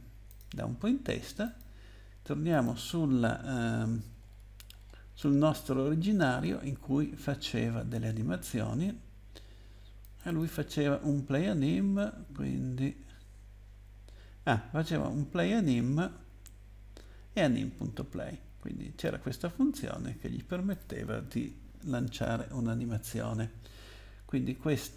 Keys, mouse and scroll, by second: 0.3 click, 1.4 click, 2.8 click, 4.1 scroll down 2, 10.0 click, 10.3 click, 19.0 click, 22.0 ctrl+c, 24.8 click.